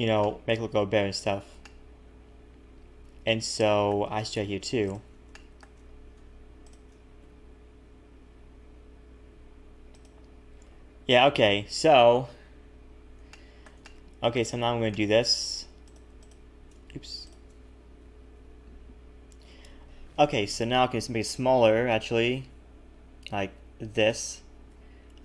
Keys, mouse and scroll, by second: 0.2 shift+middle click, 1.2-1.6 scroll down 3, 1.6 shift+middle click, 4.2-4.6 scroll up 2, 4.8 alt+shift+click, 5.3 shift+middle click, 5.8 scroll up 1, 6.6 alt+shift+click, 7.2 s, 10.5 a, 10.6 a, 10.9-12.0 scroll down 3, 13.3 shift+middle click, 13.8 middle click, 14.6-14.9 scroll up 3, 14.9 shift+middle click, 15.4-15.9 scroll up 1, 15.9 click, 15.9 scroll up 1, 16.2 shift+click, 16.9 ctrl+z, 17.2 shift+click, 18.4 ctrl+KP_Add, 19.2-19.7 scroll down 3, 21.3 s, 24.7 KP_3, 25.1-25.2 scroll up 1.